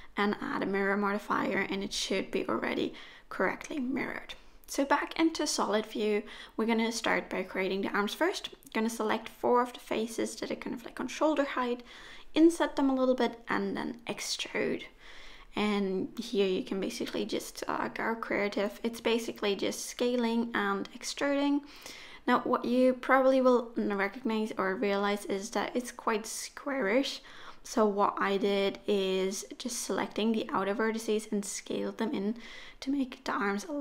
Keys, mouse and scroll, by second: 0.0 z, 1.7-2.2 scroll up 2, 2.2 middle click, 3.3 3, 4.0 click, 4.5 shift+click, 4.9 shift+click, 5.3 click, 6.3 i, 8.3 middle click, 9.5 e, 11.3 s, 14.4 middle click, 15.9 KP_1, 16.7 e, 20.4 s, 20.9 middle click, 22.1-23.0 scroll up 2, 23.1 1, 23.7 click, 24.5 shift+click, 25.2 shift+click, 26.0 click, 26.2 s, 27.7 middle click, 29.9 scroll up 1, 29.9 middle click, 30.8 s, 32.4 3, 32.7 click, 33.2 shift+click, 33.5 shift+click.